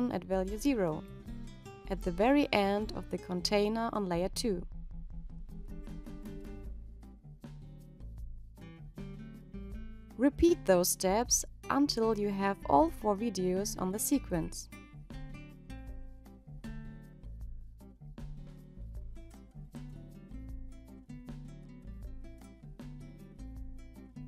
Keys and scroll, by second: 20.2 -.